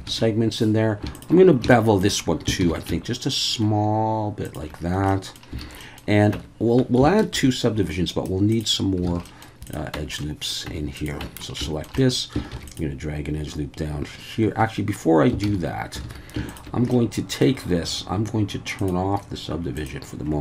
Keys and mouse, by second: 0.1 alt+a, 1.7 shift+middle click, 2.6 ctrl+b, 4.4 shift+click, 5.2 middle click, 5.6 alt+a, 5.8 middle click, 6.3 Tab, 7.4 ctrl+2, 8.2-9.0 right drag, 9.1 alt+a, 9.3 middle click, 9.6 click, 9.9 Tab, 10.2 middle click, 10.7 Tab, 11.0 click, 11.2 Tab, 11.7 shift+middle click, 12.0 middle click, 12.5 ctrl+r, 14.6 Escape, 15.5 ctrl+z, 16.0 alt+a, 16.5 alt+shift+click, 16.9 click, 18.8 click, 19.8 click.